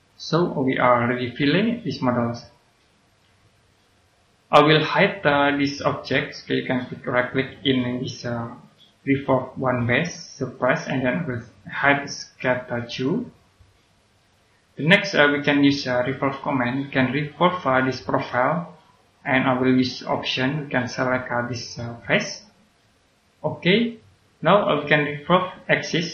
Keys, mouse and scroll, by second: 0.1 right click, 7.3 right click, 10.3 click, 12.8 right click, 14.1 click.